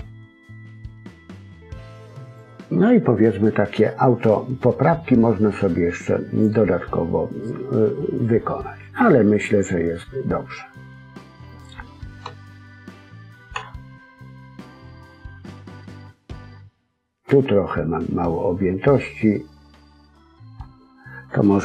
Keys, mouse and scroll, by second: 2.5-5.2 scroll down 3, 2.8 middle click, 12.2 KP_1, 13.5 KP_3, 15.1 scroll up 1, 15.8 middle click.